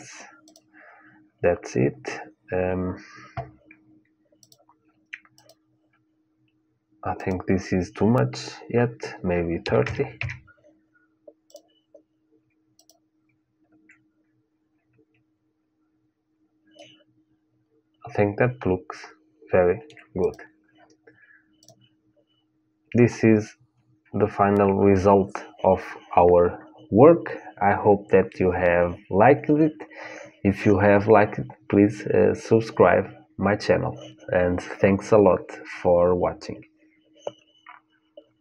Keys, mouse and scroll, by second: 4.2-9.9 drag, 11.2-14.5 drag, 16.5-18.5 middle drag, 20.0-23.3 drag, 23.8-24.8 middle drag.